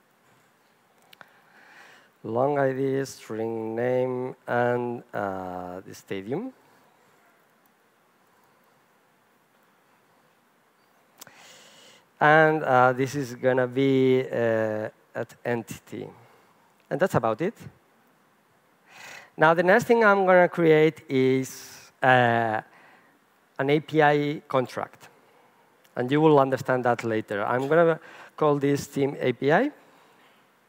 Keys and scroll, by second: 15.4 Return, 18.0 super+s, 19.9 super+n.